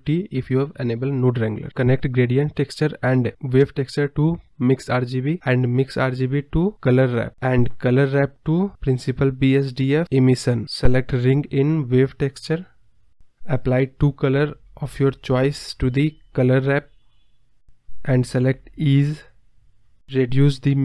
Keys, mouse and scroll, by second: 0.0 click, 0.4 ctrl+t, 1.7-2.3 drag, 3.0-6.6 drag, 6.6 scroll up 2, 8.3 click, 10.4-11.4 drag, 13.1 click, 15.0-15.9 drag, 16.6-17.3 drag, 18.6-19.2 drag, 19.2 scroll up 2, 19.9-20.8 drag.